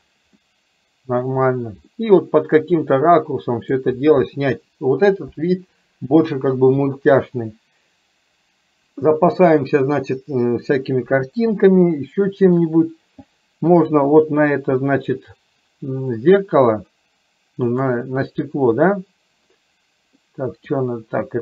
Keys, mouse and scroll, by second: 0.4-1.3 middle drag, 2.1-3.8 middle drag, 11.7-12.7 shift+middle drag, 14.2 click, 17.8 click, 20.2 middle click.